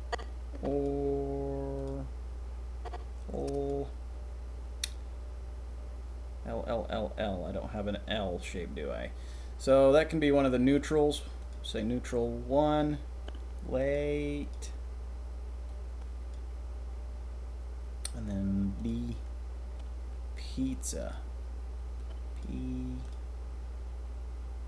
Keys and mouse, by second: 0.8-2.8 drag, 3.6-13.2 drag, 13.9-16.3 drag, 19.7 click, 21.9-24.6 drag.